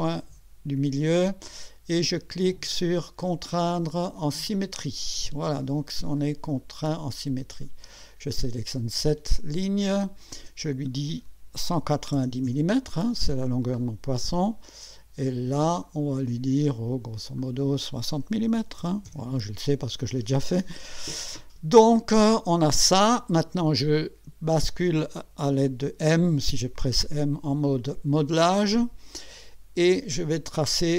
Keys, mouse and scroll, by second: 0.0 click, 4.5 click, 6.2-7.8 drag, 8.4 click, 10.3 click, 11.3-12.6 typing, 13.5 scroll down 2, 15.8 click, 17.4 click, 18.5 6, 18.8 0, 19.1 Return, 28.2 click.